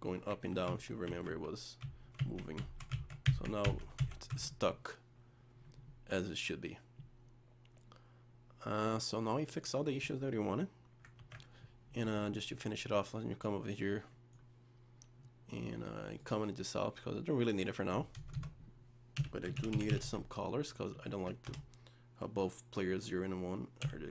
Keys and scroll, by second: 11.2 ctrl+s.